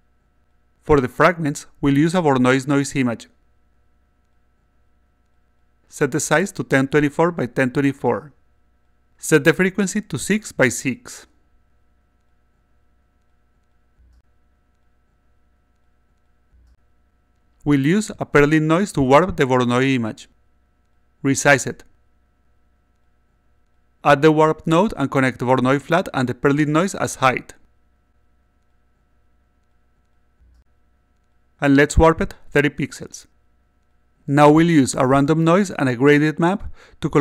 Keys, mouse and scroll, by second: 0.3 click, 3.2-4.4 drag, 5.4 click, 5.9-8.1 typing, 9.8 6, 11.3 click, 11.7-13.5 alt+drag, 14.0 click, 14.7 click, 14.8 click, 15.4 click, 15.6 click, 16.1 click, 18.9-20.1 drag, 20.8 click, 21.3-23.2 typing, 23.9 click, 25.1-26.2 drag, 27.0 click, 28.1 click, 29.9-30.9 drag, 31.6 click, 32.2 3, 32.4 0, 33.2 click, 34.8-35.8 drag, 36.7 click.